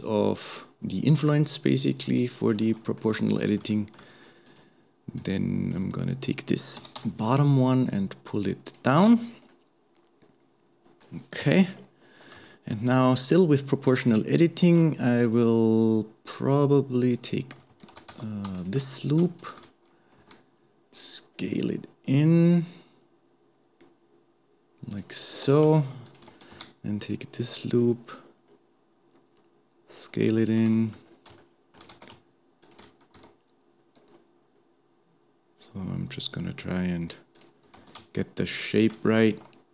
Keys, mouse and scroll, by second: 2.6 shift+middle click, 3.3-3.7 scroll up 2, 3.7 shift+middle click, 4.5 click, 5.2 click, 5.7 click, 6.8 g, 9.1-9.5 scroll down 1, 9.5-11.4 middle drag, 11.4 KP_1, 11.8-12.5 scroll up 1, 12.5-14.6 shift+middle drag, 14.6 alt+a, 17.1 shift+click, 17.9 alt+a, 18.1 alt+a, 19.4 alt+shift+click, 20.2 s, 25.5 alt+a, 26.1 alt+shift+click, 26.5 s, 31.1-31.4 scroll up 2, 31.4 shift+middle click, 31.9 alt+a, 32.6 alt+shift+click, 33.2 s, 37.8 alt+a, 38.8 alt+shift+click, 39.3 s.